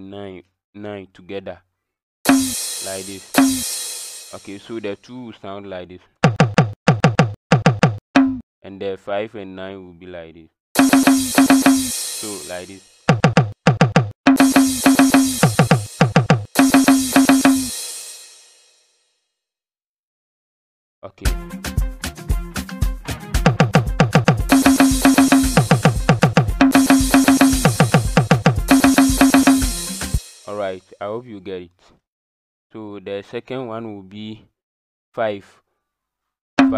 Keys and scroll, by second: 2.2 KP_9, 2.2 KP_5, 3.3 KP_9, 3.3 KP_5, 6.5-8.1 typing, 10.7 KP_9, 10.7 KP_5, 11.3 KP_9, 11.3 KP_5, 13.0 KP_2, 14.2-17.4 typing, 24.2 KP_2, 24.4 KP_5, 24.4 KP_9, 25.6 KP_2, 26.0 KP_2, 26.8 KP_5, 27.0 KP_9, 28.2 KP_2, 28.6 KP_9, 28.6 KP_5, 29.4 KP_5, 31.5 KP_5, 36.5 KP_5.